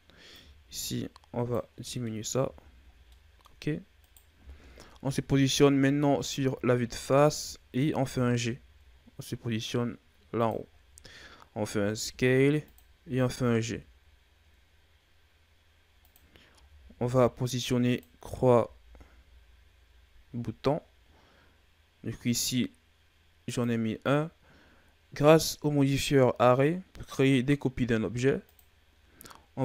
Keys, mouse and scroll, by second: 1.7-2.0 scroll down 4, 2.0 middle click, 2.3 a, 2.8 scroll down 1, 3.0 middle click, 3.9 right click, 5.0 KP_7, 6.2-7.1 ctrl+scroll down 3, 7.1-7.9 shift+scroll up 4, 7.9 g, 10.6-11.0 ctrl+scroll down 1, 11.0-11.6 scroll up 2, 11.6 s, 16.5 s, 25.1 click.